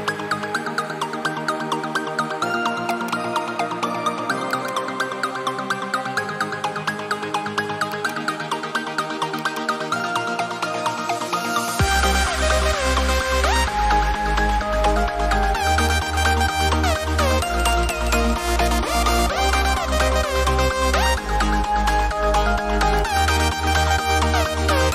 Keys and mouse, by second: 7.8 click, 14.6 ctrl+t, 15.9 click.